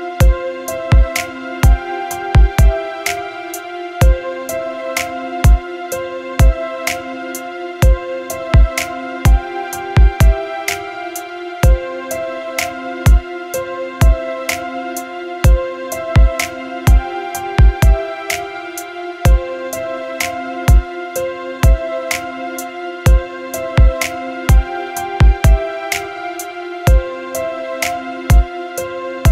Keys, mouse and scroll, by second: 5.4-16.4 drag, 19.1 click, 21.6-29.3 drag.